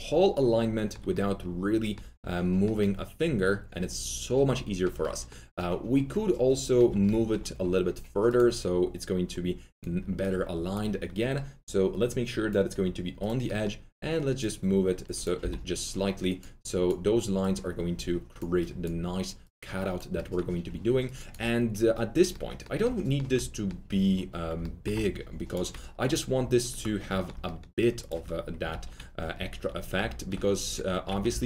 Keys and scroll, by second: 15.3 s, 22.8 s, 27.1-29.9 typing, 31.2 ctrl+alt+c.